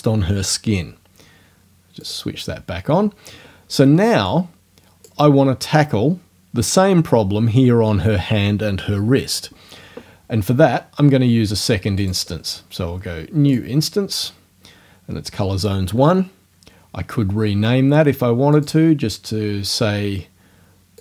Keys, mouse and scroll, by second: 2.1 click, 4.3-5.3 drag, 12.0 click, 13.5 click, 18.5 click.